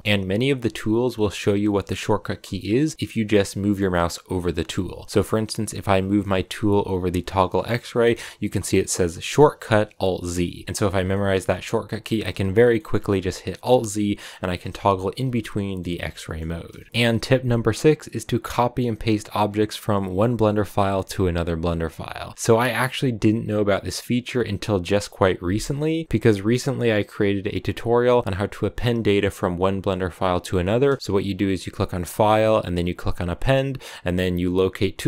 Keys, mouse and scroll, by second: 0.0-10.6 shift+middle drag, 10.6 alt+z, 10.9 middle click, 11.3 alt+z, 12.0 alt+z, 12.3 scroll up 1, 12.6 middle click, 12.8 alt+z, 13.4 alt+z, 13.8 middle click, 14.1-15.1 scroll down 1, 15.1 alt+z, 15.2 middle click, 15.8 alt+z, 16.0 middle click, 16.2 alt+z, 16.6-26.7 shift+middle drag.